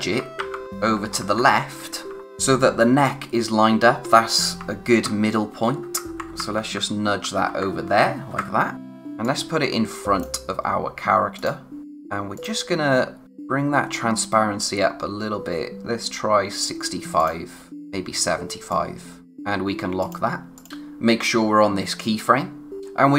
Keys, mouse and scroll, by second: 2.2-2.6 scroll down 1, 8.7-9.2 scroll up 1, 9.2 click, 11.8 space, 12.3 click, 22.8-23.1 scroll down 1.